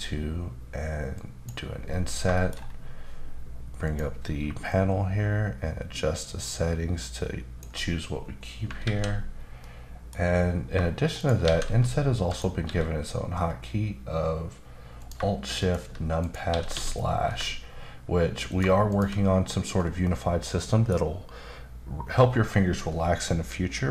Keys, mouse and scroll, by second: 1.1 click, 1.9-2.2 scroll up 2, 2.3 shift+middle click, 2.5-3.1 scroll up 3, 3.8 click, 4.7 shift+click, 8.4 scroll down 1, 8.8 alt+a, 9.3-9.6 scroll down 1, 9.6 middle click, 11.1 shift+right click, 11.4 shift+a, 12.2 click, 12.6 s, 15.0 click, 15.6 shift+click, 16.5 typing, 18.5 click, 18.9 shift+click, 20.0 middle click.